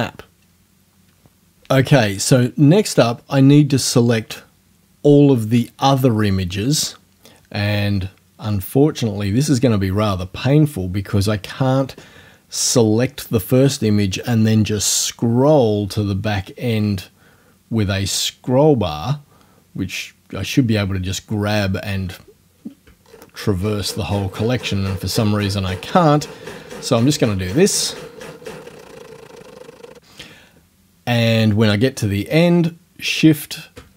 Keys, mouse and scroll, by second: 23.0-29.9 shift+scroll down 2, 29.9-33.1 shift+scroll down 1, 33.1 shift+click, 33.3-33.9 shift+scroll down 2.